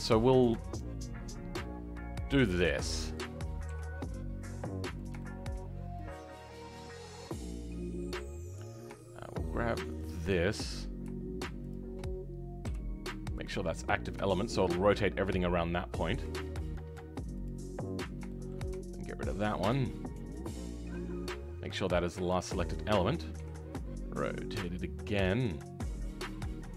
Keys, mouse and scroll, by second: 2.6 r, 3.6 g, 5.1-7.2 shift+middle drag, 7.2 click, 8.4-8.9 scroll up 5, 8.9-9.9 shift+middle drag, 9.9 shift+click, 11.6 shift+click, 13.4 ., 13.9-14.2 scroll down 5, 14.2-16.1 shift+middle drag, 16.1 r, 17.6-18.2 scroll up 3, 18.2 shift+middle click, 19.2 ctrl+click, 19.4-20.3 scroll up 2, 20.3 shift+click, 21.8-22.2 scroll down 2, 22.2-23.4 shift+middle drag, 23.4 r.